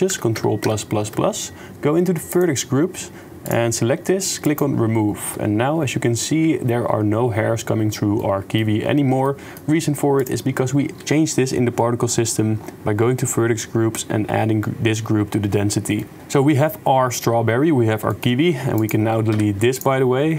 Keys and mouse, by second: 0.2 ctrl+KP_Add, 0.6 ctrl+KP_Add, 0.9 ctrl+KP_Add, 3.4 click, 3.5 middle click, 3.6 middle click, 4.5 click, 4.9 click, 6.0 click, 8.2 click, 8.7 middle click, 9.2 shift+click, 9.5 middle click, 16.0 click, 16.2 middle click, 16.3 middle click, 18.1 click.